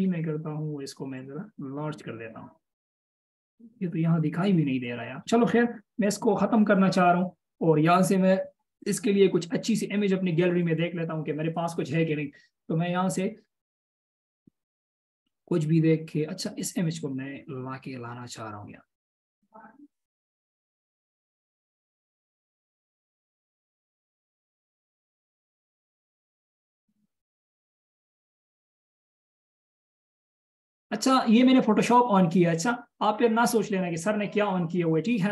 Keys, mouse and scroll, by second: 0.1 ctrl+t, 6.2 BackSpace, 13.0 scroll down 1, 13.8-14.2 scroll up 1, 19.1 space.